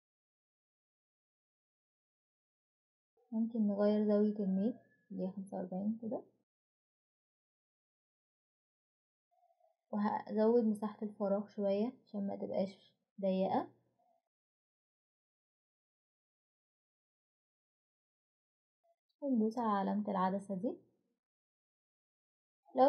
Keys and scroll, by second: 3.4 4, 3.8 5, 4.3 Return, 12.9 2, 13.1 Return, 14.8 4, 15.1 Return.